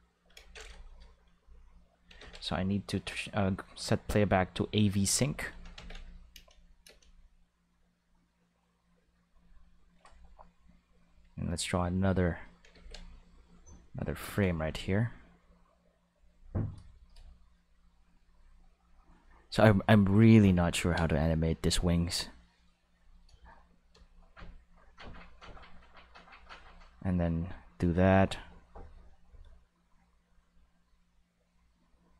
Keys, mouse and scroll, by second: 2.2 ctrl+s, 3.4 click, 4.2 click, 5.0 click, 5.7 ctrl+s, 6.0 click, 6.3 space, 6.8 space, 7.0-10.0 drag, 11.0-12.4 drag, 12.7 ctrl+z, 13.2-15.0 drag, 15.2 click, 18.2 click, 19.5 click, 20.7 ctrl+z, 22.1-23.2 drag, 23.4 shift+middle click, 26.1 click, 27.5 click, 28.5 click, 30.0 click.